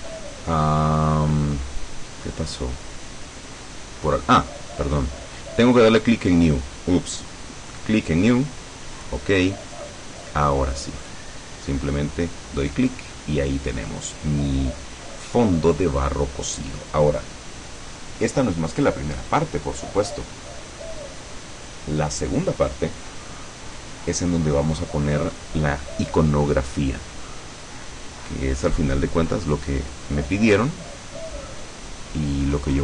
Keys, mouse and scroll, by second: 7.8 click, 9.0 click, 9.9 scroll down 2, 11.1 click, 13.0-13.3 scroll up 1, 13.4 scroll down 1, 32.6 click.